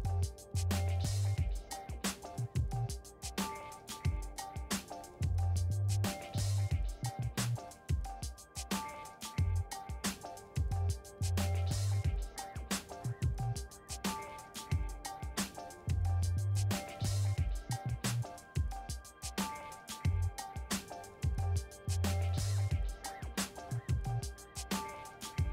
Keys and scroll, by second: 13.8 g, 23.5 ctrl+z.